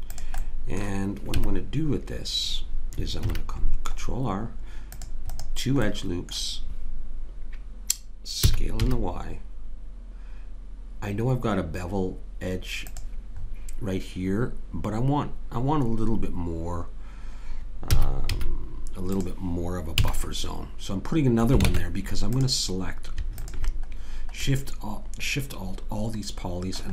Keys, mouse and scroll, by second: 1.3 Tab, 3.2 ctrl+r, 6.0 click, 6.6-8.5 drag, 8.5 s, 13.4-15.7 middle drag, 17.9 s, 20.0 a, 21.7 ctrl+Tab, 24.0 click, 25.1-26.4 middle drag.